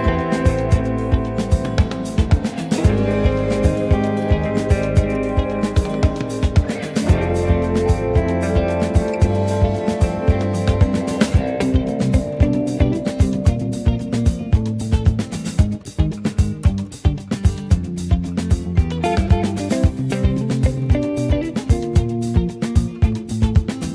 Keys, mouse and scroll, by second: 2.2 click, 4.0-5.0 shift+middle drag, 5.0 space, 7.9-12.0 middle drag, 16.3 space, 16.9 ctrl+s, 18.9 click, 19.5 Tab, 19.7 click, 20.1 middle click, 20.3-20.6 scroll up 1, 20.6 ctrl+s.